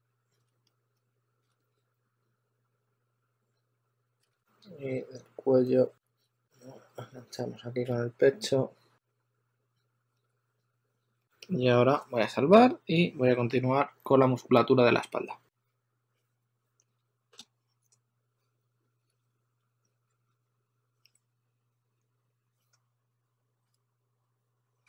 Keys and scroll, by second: 6.0 2, 7.8 s, 16.0 3, 19.5 s, 20.0 super+Tab.